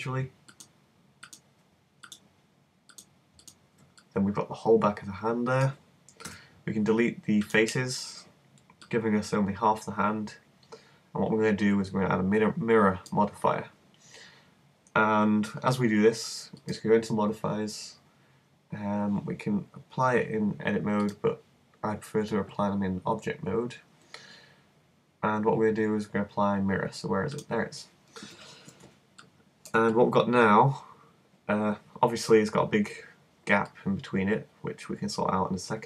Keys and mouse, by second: 4.4 middle click, 6.3 x, 8.9-11.1 middle drag, 16.6-18.4 drag, 21.1-22.9 drag, 31.3 super+middle click, 33.7 middle click, 34.7 middle click.